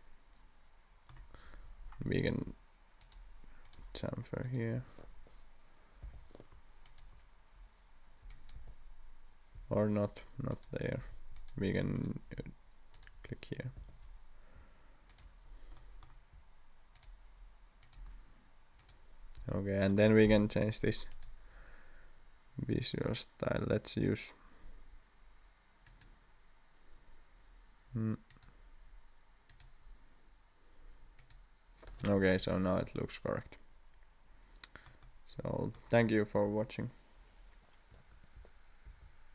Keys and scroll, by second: 6.0 2, 8.5 1, 9.6 Escape, 11.1 Escape, 13.7 2, 38.8 shift+f.